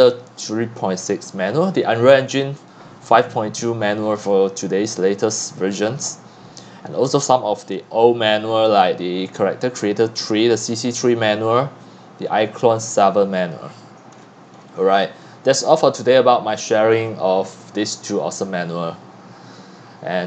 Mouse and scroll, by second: 5.5-10.8 middle drag, 5.5 scroll down 1, 5.7-7.3 scroll, 10.7 scroll down 2, 11.3-14.2 middle drag, 11.3-13.5 scroll down 1, 13.5 scroll, 14.0 scroll down 2, 14.1-15.7 scroll up 16, 15.7-20.2 drag.